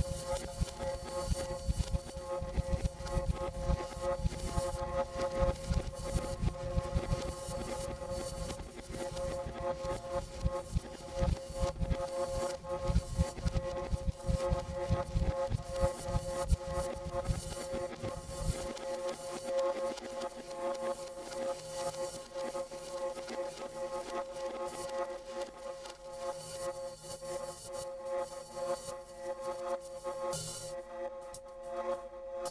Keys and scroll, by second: 1.3 Tab, 1.5 Tab, 1.8 3, 2.0 Return, 4.6 alt+r.